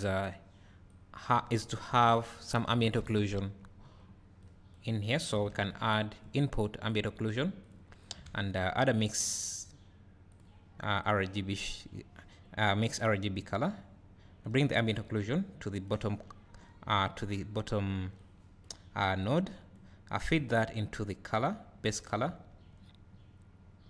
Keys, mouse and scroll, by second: 2.0 Delete, 15.9-19.3 drag, 21.5-23.8 drag.